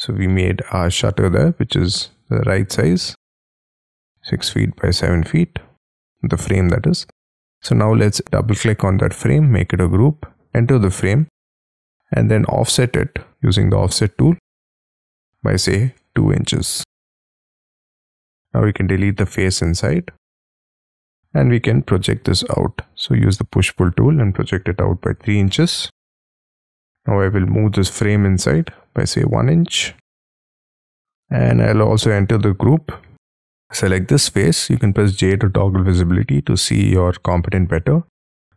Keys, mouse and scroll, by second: 0.3 middle click, 1.8 t, 2.0-2.5 scroll up 2, 3.7 space, 4.0 t, 6.0 space, 7.4 double click, 7.8 scroll up 4, 9.5 g, 9.9 double click, 11.2 scroll up 3, 11.5 f, 16.0 2, 16.6 shift+', 17.0 Return, 17.8 middle click, 18.4 space, 19.1 shift+middle click, 20.2 Delete, 20.8-21.5 scroll up 7, 21.5 p, 24.8 3, 25.1 shift+', 25.5 Return, 25.8 space, 26.2 Escape, 27.8 m, 27.8-28.2 scroll up 4, 30.1-30.7 scroll down 9, 30.7 middle click, 31.2 space, 31.9 double click, 34.0-34.7 scroll up 6, 34.7 scroll down 2, 34.9 j, 35.2 middle click, 36.0-36.6 scroll down 7, 36.6 middle click, 38.0-38.5 scroll up 6.